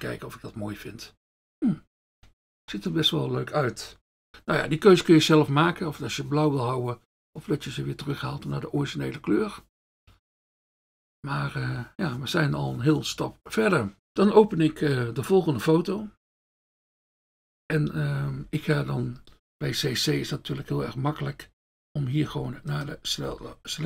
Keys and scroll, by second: 23.3 F1.